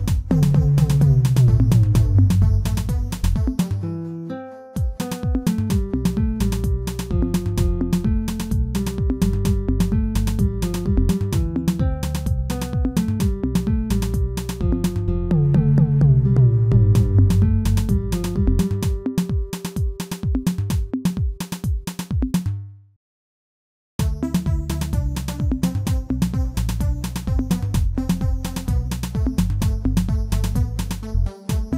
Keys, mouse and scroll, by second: 8.6 i, 9.8 i, 11.5 ctrl+r, 12.7 s, 14.0-14.5 scroll down 2, 14.5 shift+z, 14.8 Tab, 15.1 scroll down 1, 15.3-17.8 middle drag, 17.8-18.1 scroll down 2, 18.1-20.5 middle drag, 20.5 KP_1, 21.3-21.7 shift+middle drag, 21.7-22.2 scroll up 5, 22.2-23.2 shift+middle drag, 23.2 alt+h, 24.7-25.2 scroll up 2, 25.2-26.7 shift+middle drag, 27.3-27.9 scroll up 2, 27.9 click, 28.8 Tab, 29.2 shift+middle click, 30.0 alt+click, 31.0 shift+z, 31.2 shift+middle click, 31.6-31.7 scroll up 2.